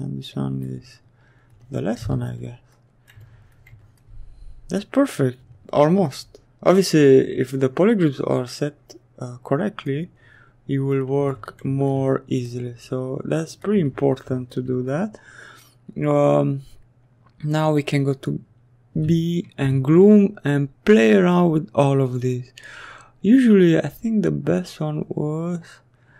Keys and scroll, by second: 16.1 b, 16.8 g.